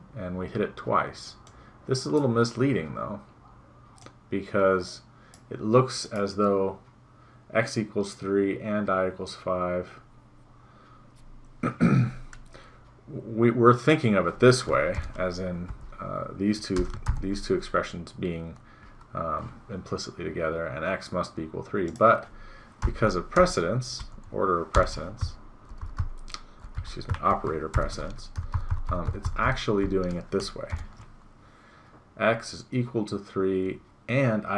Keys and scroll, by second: 15.7 End, 16.8 BackSpace, 23.3 BackSpace, 24.0 End, 24.8 BackSpace, 25.3 Left, 27.2 Right, 28.5 ctrl+Left.